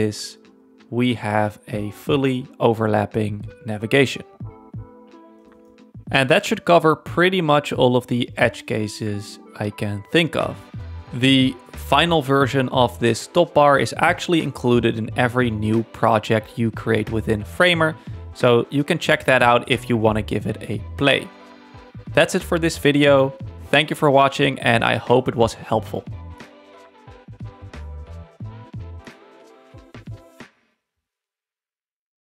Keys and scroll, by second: 8.4 super+1.